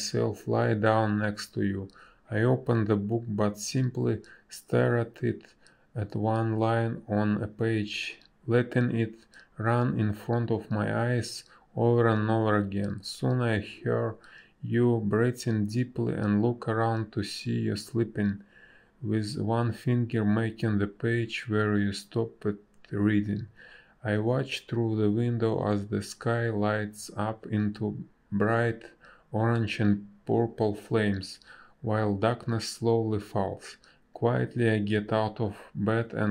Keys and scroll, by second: 2.9 a, 7.5 space, 12.3 space, 13.6 space, 18.8 space, 24.8 space, 25.9 space, 26.3 b, 26.5 space, 31.2 space, 32.0 ctrl+z, 32.0 space.